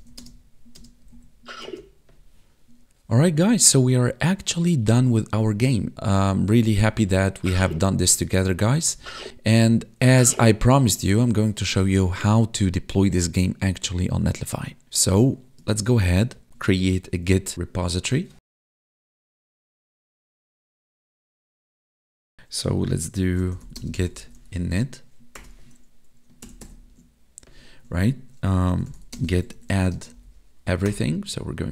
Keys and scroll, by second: 0.1 Left, 0.2 space, 1.0 Down, 1.1 Right, 1.6 space, 5.9 Up, 6.1 Left, 6.8 Up, 6.9 Right, 7.4 Down, 8.1 Right, 8.8 Down, 9.0 Left, 9.6 Down, 10.0 Right, 10.3 Up, 10.7 Left, 15.7 ctrl+`, 23.7 space, 26.4 ctrl++, 29.1 space, 29.9 space.